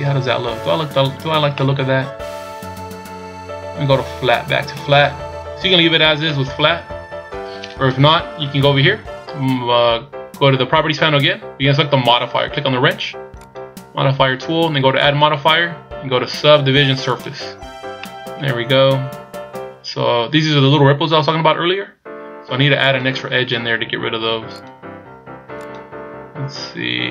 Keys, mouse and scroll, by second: 0.2-0.8 scroll up 4, 1.0-1.5 scroll down 4, 1.5 middle click, 2.8-3.9 scroll up 1, 4.8 click, 6.0 scroll down 1, 6.3 middle click, 7.9 KP_1, 8.4-8.7 scroll down 3, 13.4 click, 15.0 click, 18.0 middle click, 18.6-19.1 scroll up 6, 22.8 click, 24.5 click, 25.6 click.